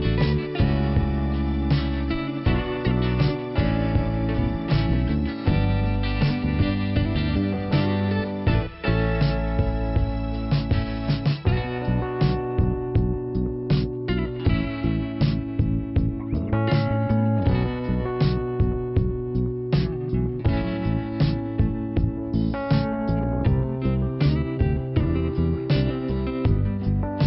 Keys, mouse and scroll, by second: 0.6 click, 1.2 click, 2.3 click, 3.6 click, 5.2 click, 12.9 right click, 13.8 click, 14.5 click, 19.2 click, 20.9 click, 22.1 click, 23.5 click.